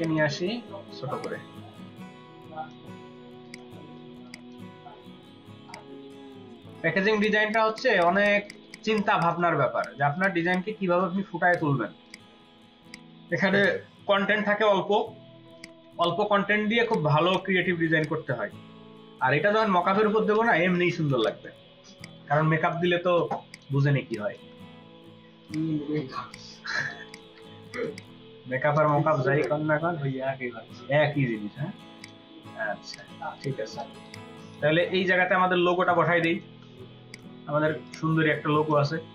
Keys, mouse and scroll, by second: 3.4 ctrl+click, 4.1 space, 7.3 ctrl+space, 7.6 ctrl+alt+double click, 7.8 ctrl+alt+click, 8.0 ctrl+alt+click, 9.3 space, 10.0 ctrl+space, 10.1 ctrl+click, 10.8-11.1 space, 15.9 double click, 17.3 shift+click, 18.9-20.5 Down, 20.7 Down, 20.9 Down, 21.8-22.6 space, 23.1 ctrl+space, 23.5 ctrl+click, 24.2-24.6 space, 26.8 ctrl+space, 27.0 ctrl+alt+click, 28.0 double click, 28.8 space, 33.2 space, 33.3 double click, 33.7 space, 36.5 space, 39.0-39.1 scroll down 4.